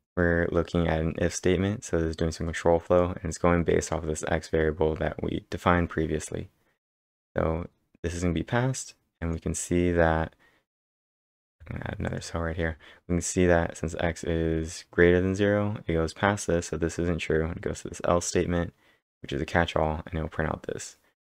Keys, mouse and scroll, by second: 2.6-3.4 typing, 2.9 click, 8.9-9.7 typing, 9.2 click, 10.8 click, 11.5 b, 12.1 click, 14.1-14.9 typing.